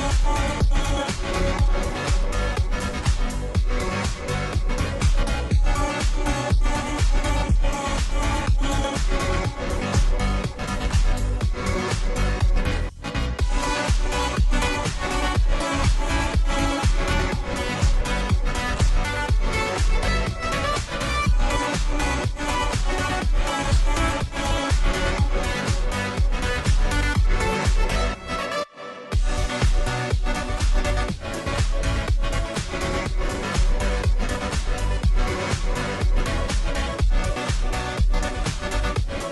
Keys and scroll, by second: 0.7 typing, 18.7 ctrl+j, 27.5 ctrl+j.